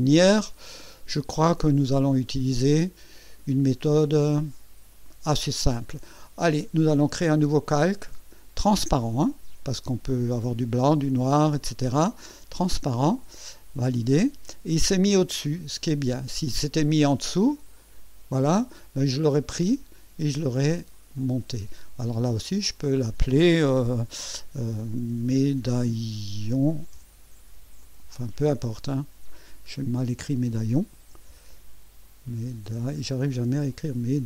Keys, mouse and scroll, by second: 7.8 click, 9.6-12.7 drag, 13.9 click, 17.3 click, 17.8 click, 20.9 click, 22.4 click, 24.8-28.5 typing, 31.3 BackSpace, 32.5 BackSpace.